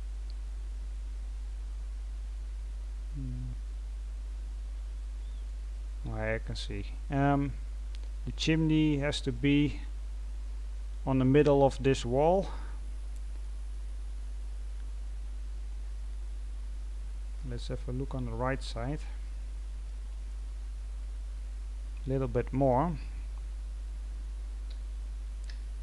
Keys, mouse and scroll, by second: 9.3-19.4 middle drag, 19.4-19.8 scroll down 2, 19.8 middle click, 20.6-21.2 scroll up 2, 21.2-21.7 scroll up 1, 22.7-24.6 scroll down 2, 24.6-25.4 scroll down 1, 25.4-25.8 scroll down 1.